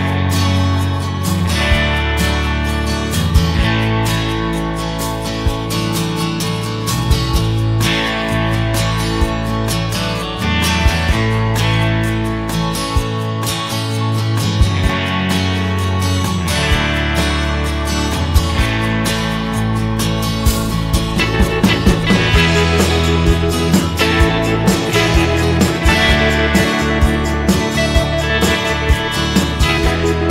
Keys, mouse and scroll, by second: 1.0 click, 3.0 click, 7.4 F7, 7.8 click, 9.3 click, 10.5-13.1 drag, 13.8 F1, 16.0-17.8 drag, 19.0-20.6 drag, 21.1-23.6 drag, 24.6-28.2 shift+drag, 30.0 shift+click.